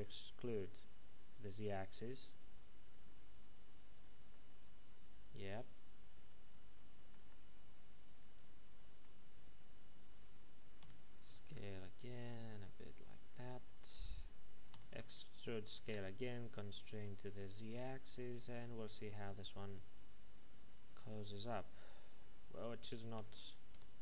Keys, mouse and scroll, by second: 3.9 click, 4.3 middle click, 10.8 s, 13.5 typing, 13.7 click, 14.7-15.8 typing, 19.9 click.